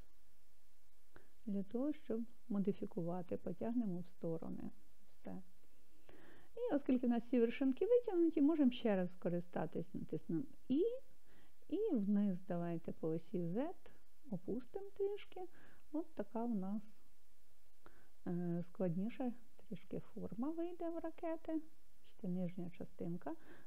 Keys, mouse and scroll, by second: 5.2 click, 10.9 e, 13.3 z, 17.6 click, 19.3-23.4 middle drag.